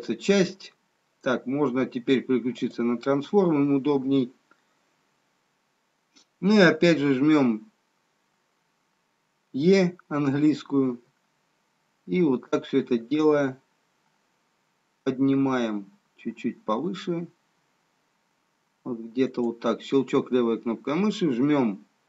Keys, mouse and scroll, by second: 2.6 click, 10.9 e.